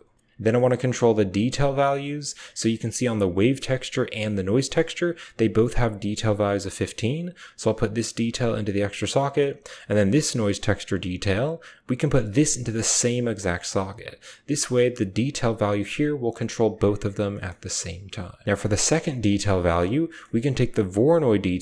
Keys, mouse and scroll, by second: 0.0 middle click, 0.2 middle click, 0.5 drag, 0.6 click, 1.1 click, 1.7 g, 3.2 click, 3.3 typing, 4.3 click, 7.6-8.8 drag, 9.0-10.5 typing, 9.0 click, 9.9 click, 11.9-13.4 drag, 13.4 typing, 18.7 drag, 19.0 click, 19.4-20.5 typing, 19.6 middle click, 20.0 click, 20.6 drag.